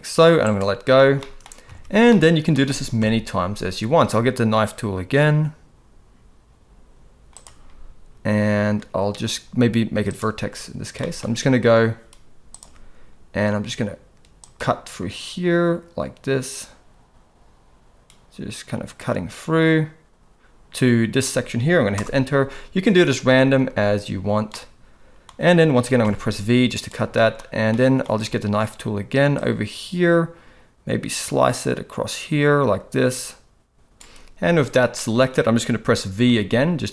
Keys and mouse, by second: 1.2 shift+middle click, 1.7 alt+a, 2.1 middle click, 2.9 KP_7, 7.4 click, 10.2 click, 11.0 shift+middle click, 12.6 click, 14.4-21.9 drag, 24.5 middle click, 26.0 v, 27.1 shift+middle click, 27.7 middle click, 29.3-33.9 drag, 33.9 c, 34.9 middle click, 36.3 v.